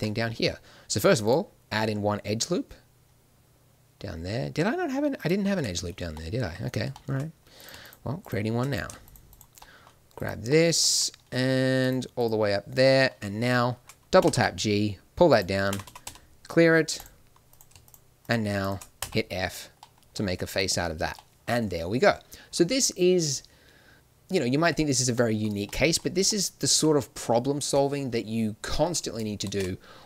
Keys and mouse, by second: 3.0-5.1 middle drag, 5.4-7.5 middle drag, 7.5-12.8 drag, 12.8 middle click, 13.4 click, 14.1 g, 15.6 a, 15.8 a, 16.0 w, 17.4-18.9 right drag, 18.9 f, 20.2 Tab, 24.5 Tab, 26.7 a, 29.4 shift+space.